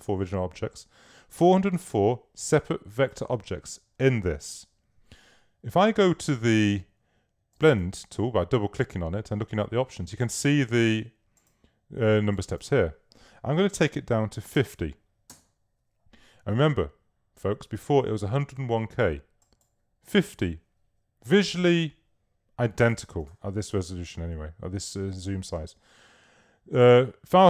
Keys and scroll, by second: 14.3-15.1 typing.